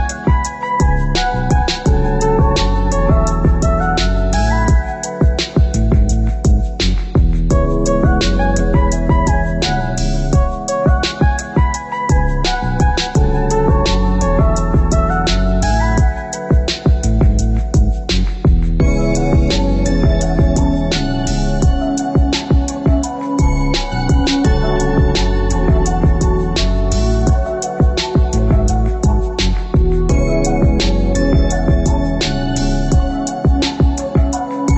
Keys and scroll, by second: 11.0 ctrl+0, 19.3 ctrl+0.